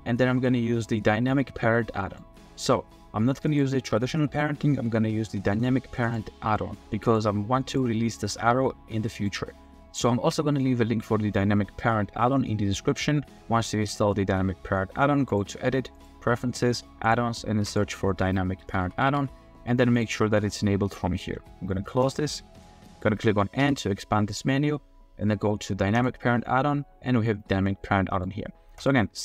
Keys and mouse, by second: 1.5-2.2 drag, 3.7 r, 6.1-6.7 drag, 7.0 click, 8.5 r, 9.1-9.8 drag, 10.6-12.4 drag, 12.4-13.0 middle drag, 15.4-16.1 drag, 23.6 n, 27.7-28.2 drag, 28.8 click.